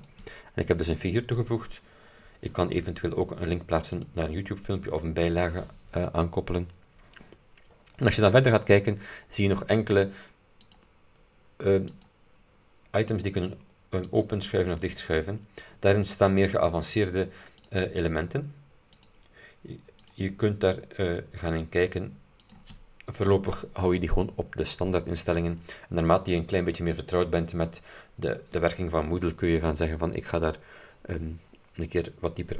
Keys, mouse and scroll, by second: 0.0 click, 0.5-1.2 scroll up 4, 1.7-2.4 scroll down 4, 4.1 click, 7.4-8.4 scroll down 4, 10.7 click, 12.0 click, 13.2 click, 14.2 click, 15.0 click, 17.7 click, 19.0 click, 20.1 click, 21.2 click, 22.5 click.